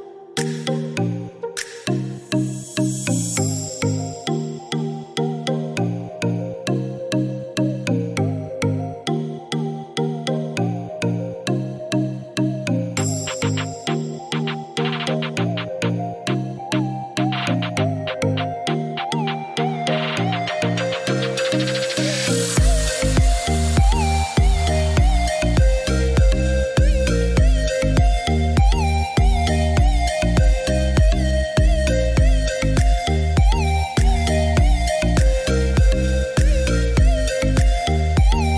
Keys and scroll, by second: 10.2 Escape.